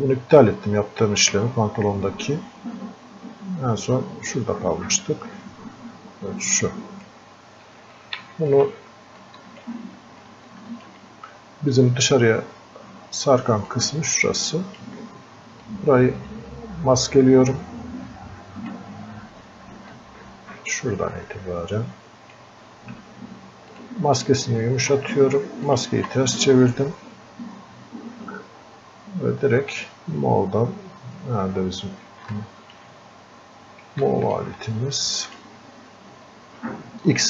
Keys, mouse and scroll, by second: 8.0 click, 9.2-10.5 alt+drag, 10.5-13.7 alt+drag, 13.7-15.7 drag, 15.7-19.9 ctrl+drag, 19.9-23.7 ctrl+drag, 29.7 click, 31.5-32.1 scroll up 1, 32.3 alt+click, 33.4 scroll up 1, 34.1 alt+click, 35.3 click.